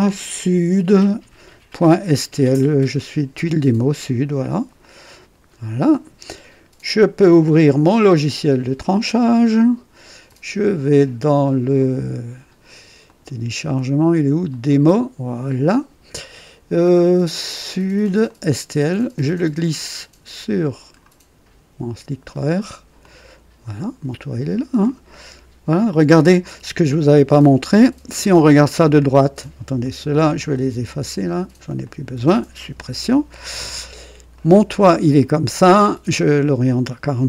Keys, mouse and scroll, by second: 4.7 click, 7.6 click, 9.0 click, 10.2 click, 11.7 click, 13.0 click, 14.4 click, 18.2-21.0 drag, 22.2-22.7 scroll up 2, 22.9-24.9 drag, 26.7 click, 28.0 KP_3, 28.8 click, 29.7 click, 30.4 click, 31.8 shift+click, 32.7 Delete, 33.3-34.0 shift+scroll up 2, 34.3-35.1 right drag, 36.5 click.